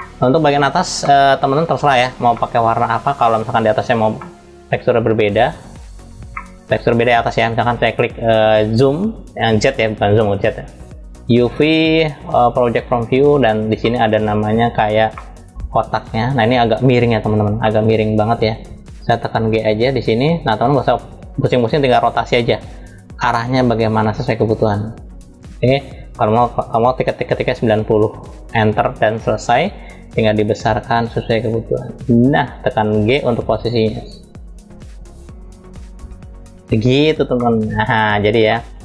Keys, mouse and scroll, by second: 0.7 middle click, 1.2 scroll down 2, 2.0 middle click, 3.2 click, 3.9-5.1 middle drag, 5.1 click, 6.1 shift+middle click, 8.3 click, 13.5 middle click, 14.3-15.7 scroll up 3, 14.8 middle click, 15.7-17.2 drag, 17.2 middle click, 18.9 g, 37.0 middle click, 38.2-38.8 middle drag.